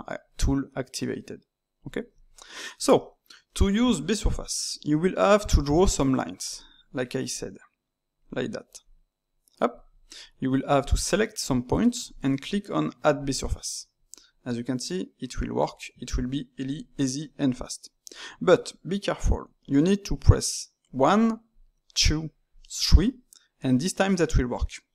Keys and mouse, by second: 2.3-4.9 middle drag, 4.9 d, 5.4 d, 5.6 click, 6.4-6.7 d, 7.3 click, 8.2 d, 8.8 click, 9.7 d, 10.7 alt+click, 13.1-16.2 drag, 16.2 ctrl+z, 20.2 click, 20.9 d, 21.5 click, 21.9-22.3 d, 22.5 click, 22.8-24.9 d.